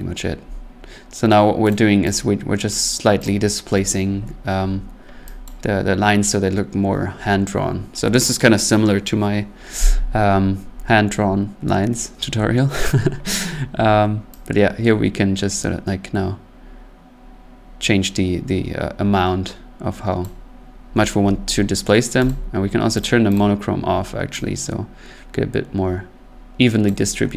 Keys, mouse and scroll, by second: 1.7 click, 2.1 click, 2.8 click, 3.3 click, 5.4 click, 20.2 click, 22.3 click, 23.0 click, 23.4 click, 26.8 click.